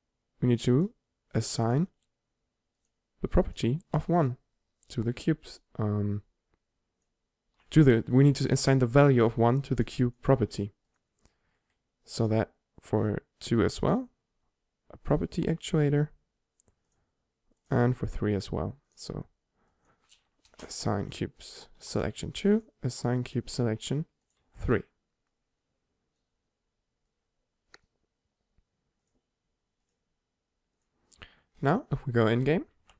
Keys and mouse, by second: 0.2-1.8 drag, 9.9-14.2 drag, 17.7-20.9 drag, 21.5-28.4 drag, 32.9 p.